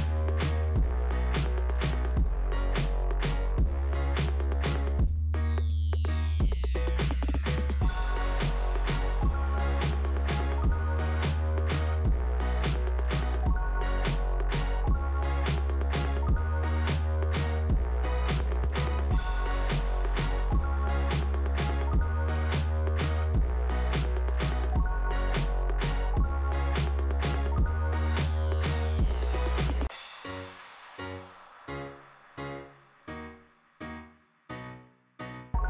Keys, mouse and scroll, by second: 0.0 middle click, 1.1 ', 1.9 click, 2.6 click, 3.6 click, 5.1 click, 6.5 click, 8.9 right click, 9.7 click, 9.9 click, 10.9 click, 11.9 click, 13.8 click, 17.7 click, 17.9 click, 20.3 click, 21.3 click, 22.0 click, 23.6 click, 28.1 scroll up 1, 30.3 click, 31.7-32.6 scroll up 2, 31.8 click, 33.1 click, 34.2 click, 35.4 scroll down 2, 35.5 click.